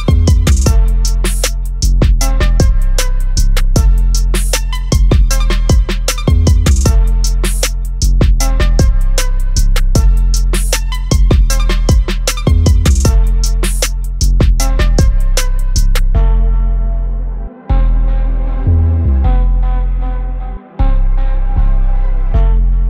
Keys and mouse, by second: 0.3 click, 3.4-4.4 typing, 4.4 click, 10.0 click, 13.2 click, 21.6 click.